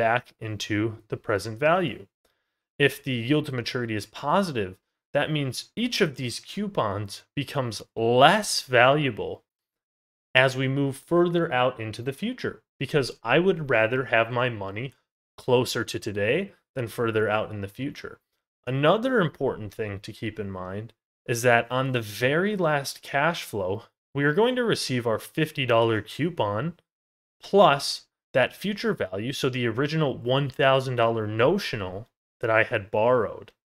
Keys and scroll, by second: 2.0 ctrl+z, 11.6 ctrl+z, 27.4 ctrl+z, 30.8 ctrl+z.